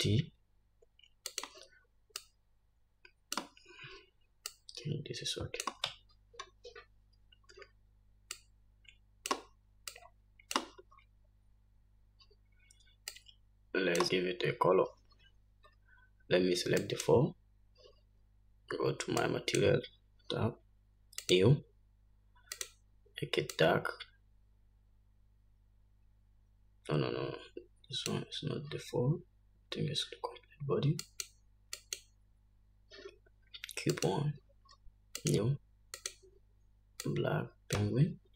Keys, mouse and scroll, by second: 0.5 shift+t, 2.9-17.9 drag, 7.6 scroll up 1, 8.3-8.8 scroll up 1, 11.6 scroll up 1, 12.1 scroll up 1, 12.9-13.2 scroll down 1, 20.1 click, 22.1-23.4 drag, 32.0 click, 32.7 click, 34.9 click, 36.2-37.2 drag.